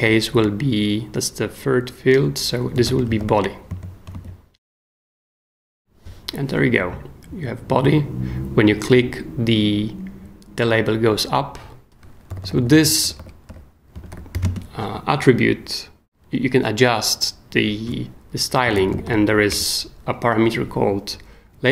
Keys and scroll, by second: 2.5-3.7 typing, 4.1 shift+super+s, 12.3-14.8 typing, 18.4-19.5 typing.